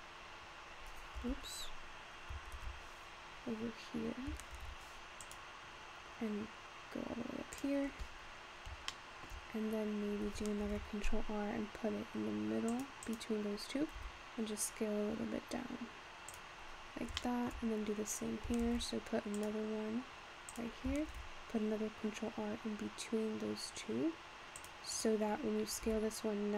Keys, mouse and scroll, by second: 1.8-2.6 scroll down 3, 2.6 ctrl+z, 4.5 ctrl+r, 8.2-8.9 scroll up 5, 8.9 shift+scroll up 1, 9.0 shift+middle click, 9.5-10.8 scroll down 3, 10.8 ctrl+r, 14.0 s, 17.2 shift+middle click, 17.6-18.1 scroll up 2, 18.1-18.7 scroll down 1, 18.7 ctrl+r, 21.1 ctrl+r, 25.9 s.